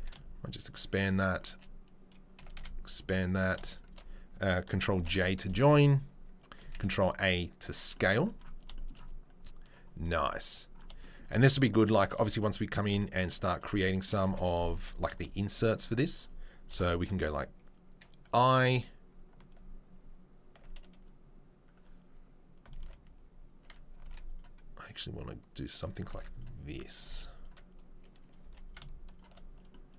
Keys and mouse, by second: 2.4 s, 3.7 shift+right click, 5.0 ctrl+j, 6.7 ctrl+a, 8.6-9.6 shift+middle drag, 9.6 click, 9.7-15.3 middle drag, 13.7 Tab, 14.7 Tab, 15.3 right click, 15.7-28.6 middle drag, 16.7 i, 24.0 ctrl+r, 26.1 ctrl+r, 28.4 3, 28.6 right click, 28.7 shift+middle click, 29.1 shift+right click, 29.2-29.9 shift+middle drag.